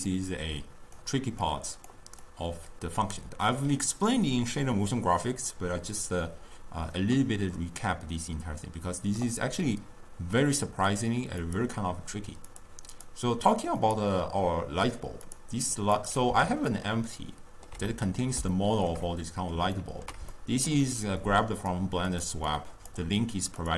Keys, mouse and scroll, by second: 0.1 click, 1.5 click, 2.3 click, 10.9 click, 11.5 click, 12.6 click, 13.0 click, 13.9 click, 15.4 click, 16.0 click, 16.8-21.3 ctrl+middle drag, 21.3 click, 22.2 click, 22.6 click, 23.6 click.